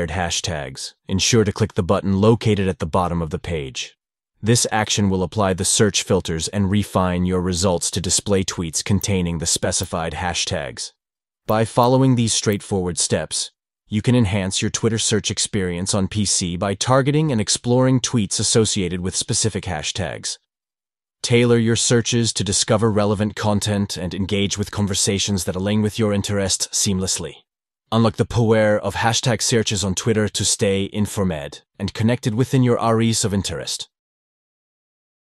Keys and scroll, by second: 3.4 shift+3.